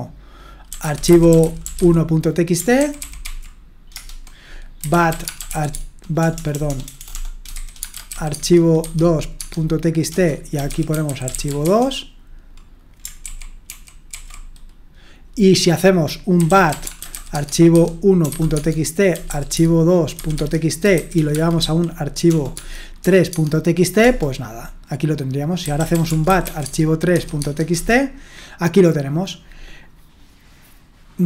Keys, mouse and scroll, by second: 0.4-2.3 typing, 2.8 ctrl+d, 3.0 ctrl+d, 3.2 ctrl+d, 4.0 Return, 4.6-8.8 typing, 9.4 Tab, 9.9-12.1 typing, 13.2 ctrl+d, 13.7 ctrl+d, 14.1 ctrl+d, 16.1-23.0 typing, 18.6 Tab, 20.4 Tab, 24.0 typing, 25.4-27.1 typing, 27.4 Tab, 27.7 Return.